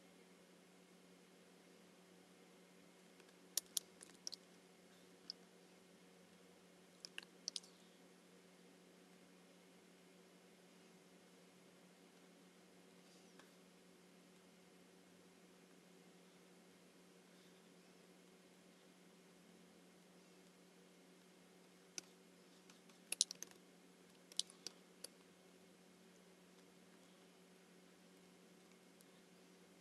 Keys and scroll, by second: 3.2 space, 4.0 super+-, 7.2 super+=, 22.0 space, 24.1 super+=, 24.7 space.